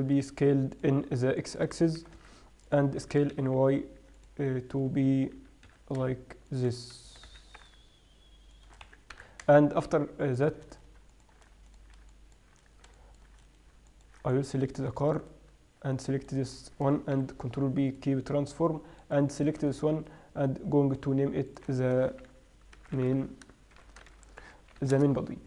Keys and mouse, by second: 0.2 s, 1.4-2.4 drag, 2.4 g, 2.6 middle click, 3.4 s, 5.8 s, 7.0 middle click, 7.5 g, 9.2 s, 15.6-17.6 right drag, 17.6 ctrl+p, 18.5-19.4 drag, 19.8 right click, 21.4-23.6 middle drag, 23.6 right click.